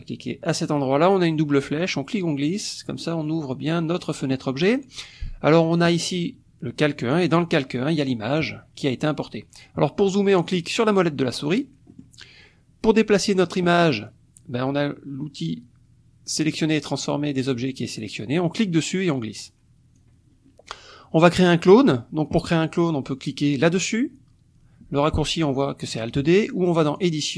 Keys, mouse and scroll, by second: 1.8-3.2 drag, 5.8 click, 7.3 click, 10.4 click, 10.9 click, 11.9 click, 13.0 click, 18.5-20.1 drag, 26.9 click.